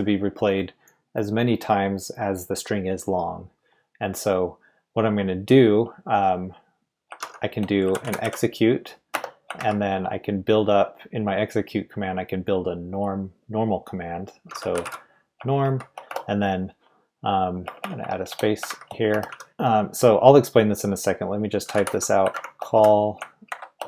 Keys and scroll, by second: 7.2-9.5 typing, 14.2-16.1 typing, 17.6-19.4 typing, 21.4-23.8 typing.